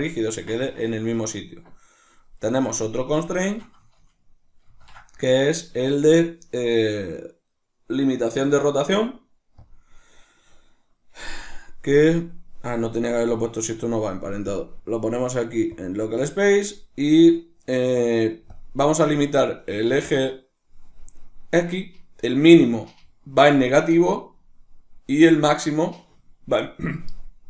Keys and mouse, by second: 1.4 right click, 2.4 right drag, 3.0 shift+right click, 4.3 ctrl+shift+c, 14.2-22.2 drag.